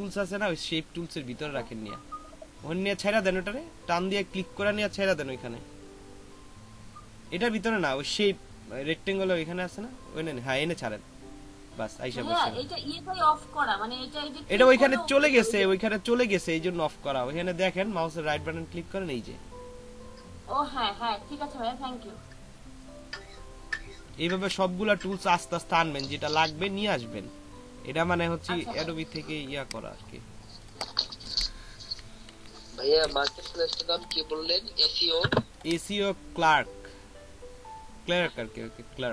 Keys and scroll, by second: 32.3 ctrl+a, 33.1 ctrl+c.